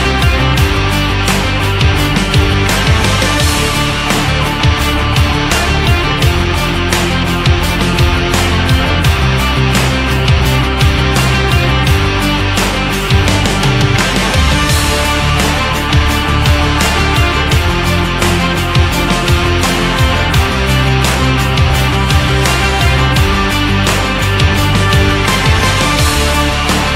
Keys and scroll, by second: 25.5 ctrl+z.